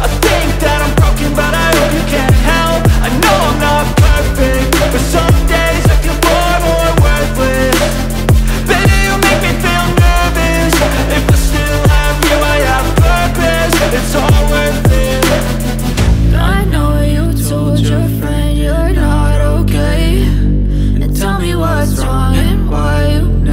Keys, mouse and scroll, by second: 6.6 ctrl++, 6.6 click, 7.2 ctrl++, 8.2 ctrl++, 8.2-11.2 drag, 11.2 space, 22.6-23.5 drag.